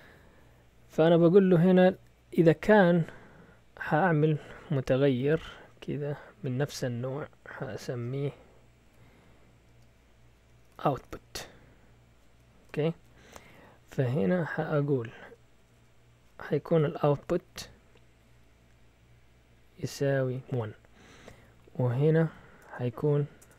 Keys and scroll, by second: 4.0 Up, 4.2 Up, 4.3 Up, 4.4 Up, 4.6 Up, 5.2-6.6 typing, 8.8-14.1 typing, 15.2-17.9 typing, 20.2-20.9 typing, 21.1 Down, 21.3 Down, 21.5 Down, 21.7 Down, 22.2 Up, 22.6 Return, 23.4-23.5 typing.